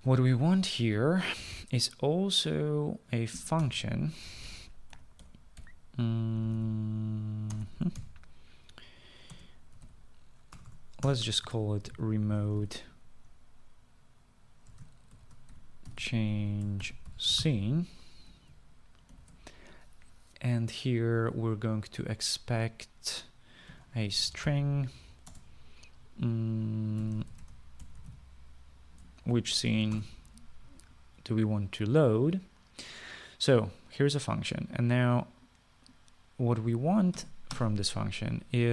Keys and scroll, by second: 4.9 Return, 5.0 Return, 6.0-14.3 typing, 16.1-19.2 typing, 20.4 typing, 24.7-26.6 typing, 28.0-31.0 typing, 31.2 Return, 38.4 Tab.